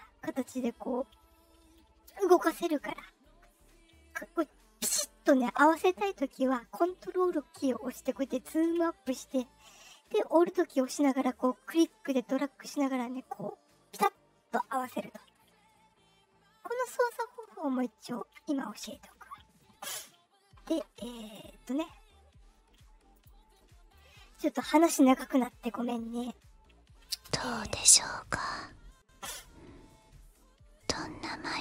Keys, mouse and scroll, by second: 9.3-14.5 alt+drag, 15.2-16.9 ctrl+scroll down 14, 17.1-18.6 ctrl+scroll up 1, 19.0 middle click, 19.5 middle drag, 19.8-21.2 middle drag, 21.2 click, 23.1 click, 23.9-25.3 drag, 27.0 space.